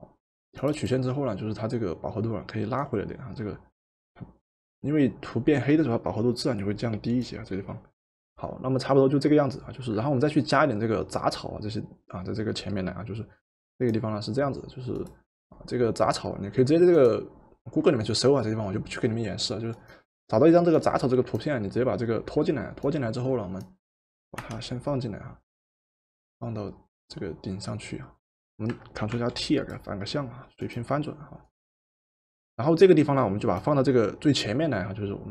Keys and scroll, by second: 24.3 Return, 29.1 ctrl+t.